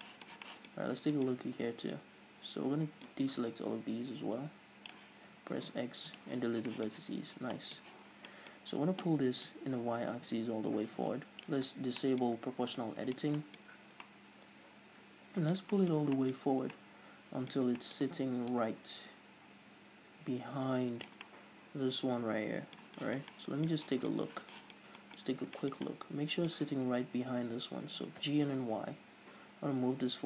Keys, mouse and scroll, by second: 0.1-3.1 shift+middle drag, 0.8-1.1 scroll up 2, 3.1 click, 5.3 x, 6.5 scroll down 1, 6.7-9.5 shift+middle drag, 7.1 scroll down 1, 7.3 a, 7.9 z, 8.1 scroll down 1, 8.6-9.5 scroll up 1, 9.5-12.0 drag, 12.0-18.5 middle drag, 12.5 o, 13.8-14.1 scroll up 2, 16.5-16.8 scroll up 2, 18.5-21.3 drag, 21.3-30.2 middle drag, 24.2-24.5 scroll up 2, 25.3-25.6 scroll up 2, 28.0 g.